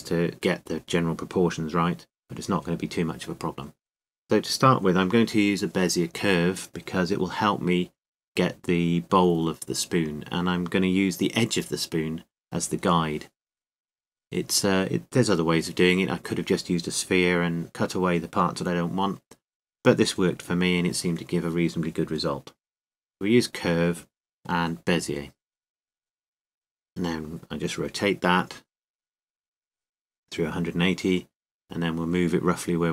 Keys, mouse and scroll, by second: 2.1 KP_7, 2.1 KP_8, 18.1-23.8 drag, 29.6 r, 32.8 g.